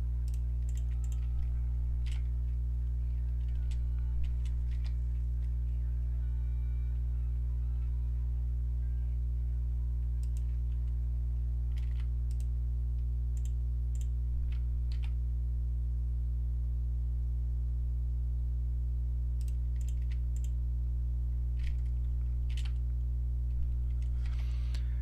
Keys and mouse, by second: 0.7-3.4 drag, 2.1 e, 11.8 ctrl+r, 13.9-18.1 drag, 14.9 e, 19.8-22.5 drag, 22.5 e.